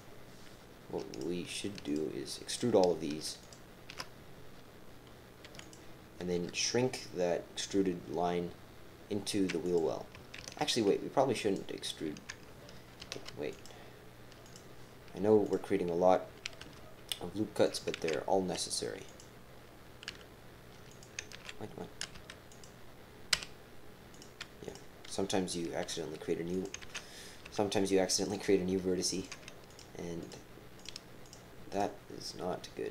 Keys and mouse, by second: 1.1 click, 1.8 shift+click, 2.5 shift+click, 3.4 alt+shift+click, 5.4 e, 6.4 s, 8.0-8.8 typing, 10.4 ctrl+z, 11.4 click, 13.0 ctrl+r, 16.6-20.1 typing, 19.0 click, 21.3 ctrl+z, 22.1 g, 23.3 x, 24.6 click, 25.8 e, 26.8 ctrl+z, 27.4 g, 29.1 click, 29.7 shift+click, 30.2 shift+click, 31.7 shift+click.